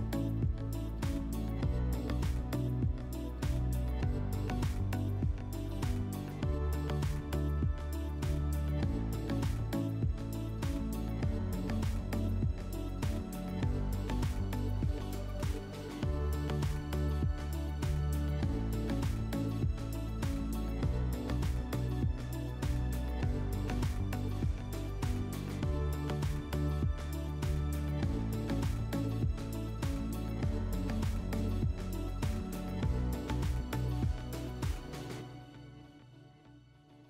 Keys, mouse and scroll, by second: 0.5 click, 1.7 click, 3.1 click, 5.3 click, 8.9 click, 10.4 click, 11.6 click, 12.2 click, 13.3 alt+middle click, 16.3 click, 18.2 click, 19.8 click, 22.5 click, 24.6-27.8 drag, 28.4-30.0 drag, 32.7 click, 35.4 click.